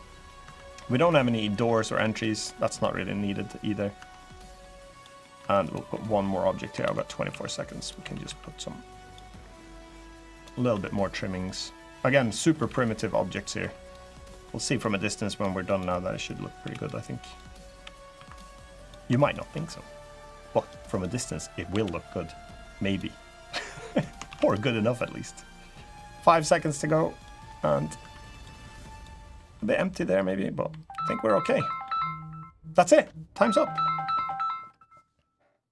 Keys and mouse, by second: 0.2 Tab, 0.5 click, 0.5 middle click, 1.0 middle click, 1.4 middle click, 2.2 middle click, 3.7 Tab, 3.9 click, 4.7 click, 4.9 click, 5.7 Tab, 5.7 click, 6.6 shift+d, 7.0 s, 7.5 click, 7.7 s, 8.0 x, 8.7 click, 9.3 click, 10.5 e, 11.2 click, 12.4 ctrl+r, 13.0 click, 13.3 2, 13.6 click, 14.0 middle click, 14.6 click, 16.5 click, 16.5 l, 17.0 click, 17.5 l, 17.9 3, 18.0 click, 18.5 click, 18.9 shift+click, 19.8 click, 20.6 click, 21.4 l, 22.2 click, 23.2 click, 24.0 shift+d, 24.8-27.0 drag, 27.2 middle click, 27.7 Tab, 28.7 click, 29.1 middle drag, 29.7-30.0 middle drag, 30.4-30.8 drag, 31.0-31.6 drag.